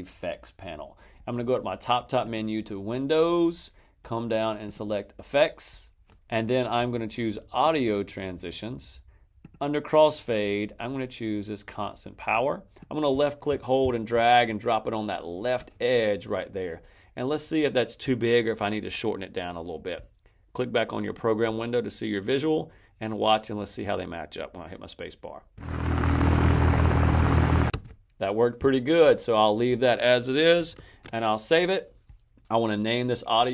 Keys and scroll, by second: 25.4 space, 27.6 space, 30.6 super+s.